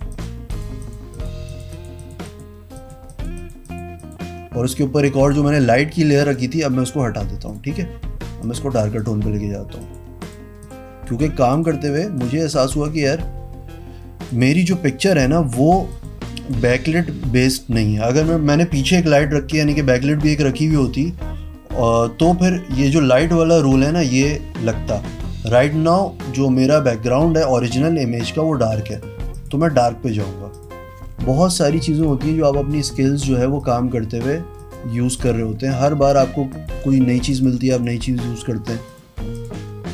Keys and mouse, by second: 2.9 click, 3.3 click, 3.6 click, 3.9 click, 4.2 click, 6.4 click, 7.7 click, 8.6 click, 9.2 click, 10.0 click, 10.4 click, 10.8 click, 11.7 click, 12.0 click, 12.4 click, 13.0 click, 14.5 click, 15.3 click, 16.1 click, 23.3 click, 23.8 click, 29.1 click, 29.6 click, 31.4 v, 32.2 click, 33.0 click, 33.8 click, 34.8 click, 35.4-36.9 drag, 37.5 click, 39.1 click, 39.6 click, 39.8 e.